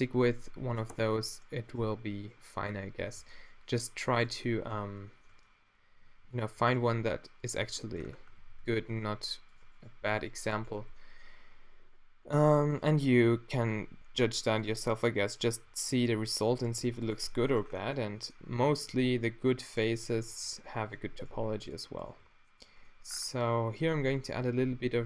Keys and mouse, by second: 0.4 drag, 0.9 Tab, 3.2 a, 8.4 ctrl+r, 10.8 f, 13.9 g, 15.6 g, 16.8 g, 17.6 Tab, 19.0 Tab, 20.3 g, 21.3 g, 22.2 g, 23.9 g.